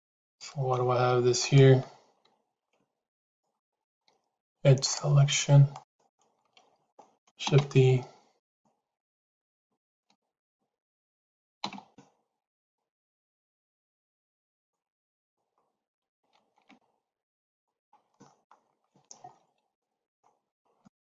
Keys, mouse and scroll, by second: 3.0 click, 3.5 middle click, 4.7 click, 5.6 click, 6.1 middle click, 7.3 shift+e, 9.0 click, 9.6 shift+click, 11.5 shift+e, 15.0 click, 16.3 shift+e, 18.0 middle click, 19.6 middle click, 20.7 shift+middle click.